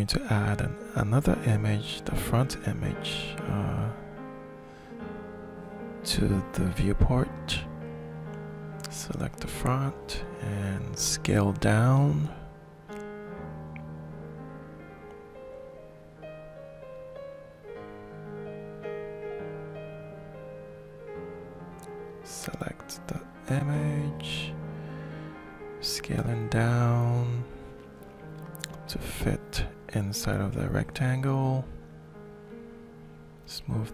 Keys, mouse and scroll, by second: 0.7 click, 1.8 click, 2.9 click, 4.5 click, 7.5 click, 7.7 click, 11.9-14.3 ctrl+shift+drag, 15.0 click, 16.1-17.8 ctrl+shift+middle drag, 17.8 ctrl+shift+click, 18.0 ctrl+shift+middle click, 18.2 ctrl+shift+click, 19.6 click, 20.6-22.7 shift+middle drag, 22.7 click, 24.0 click, 24.7 click, 25.4 click, 26.2 click, 26.8 click, 27.4 click, 28.7 middle click, 30.8-31.9 shift+middle drag, 32.3-33.5 drag.